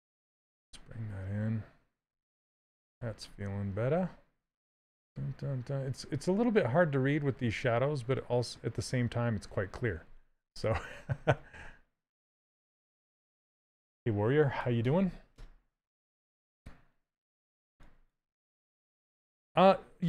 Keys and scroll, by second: 16.8 s.